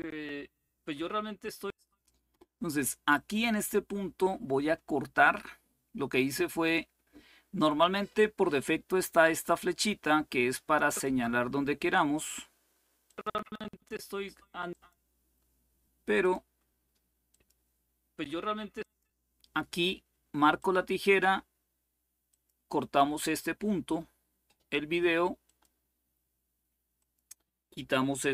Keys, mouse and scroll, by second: 1.4 click, 2.9 click, 7.3 click, 10.6-13.0 drag, 14.4 click, 15.9 click, 17.0 click, 18.5 click, 20.3 click, 22.0-23.0 drag, 25.2 click, 26.7-27.7 drag.